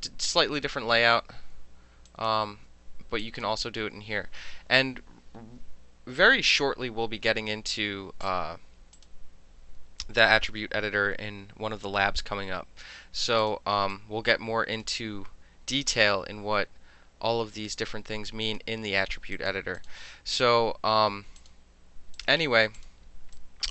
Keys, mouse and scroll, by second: 0.2 click, 1.1 KP_9, 1.4 KP_Enter, 2.0 click, 2.4 KP_6, 2.7 KP_Enter, 3.2 click, 3.5 KP_6, 8.2-9.0 drag, 13.4 click, 13.9-14.8 drag, 18.4 click, 19.3 click, 19.7 click, 21.3 click, 22.1 click, 22.7 click, 23.3-23.7 drag.